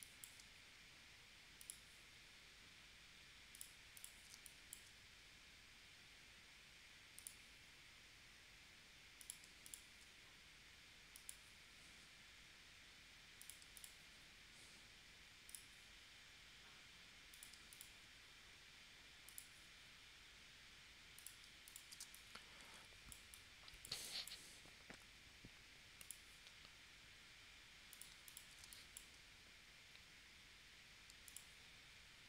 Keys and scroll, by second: 4.3 space, 22.0 space, 28.6 space.